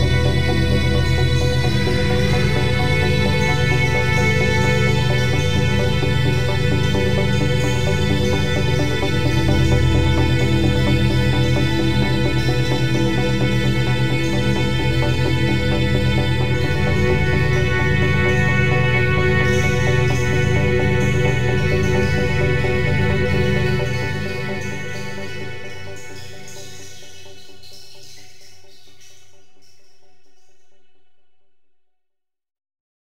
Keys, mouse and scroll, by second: 5.2-7.2 typing, 8.7 ctrl+space, 10.4-13.5 drag, 13.5 t, 13.9 click, 14.7 Return, 16.5-17.0 typing, 19.6 typing, 21.7 click, 31.7 click.